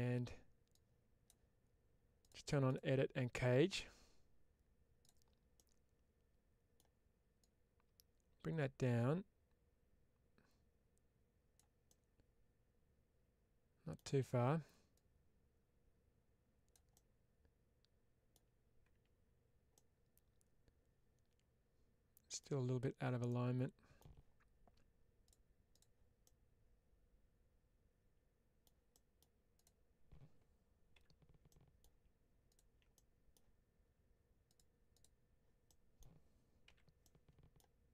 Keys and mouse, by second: 0.7 click, 5.4-6.6 middle drag, 7.3-11.4 drag, 11.7-13.8 middle drag, 14.8-16.7 drag, 16.8-18.2 middle drag, 19.6-22.3 middle drag, 22.7 Tab, 23.1 middle click, 25.6 click, 26.1-28.5 middle drag, 28.8 middle click, 30.8 /, 31.4 middle click, 32.4 ctrl+click, 32.8 middle click, 35.6 middle click, 36.9 middle click.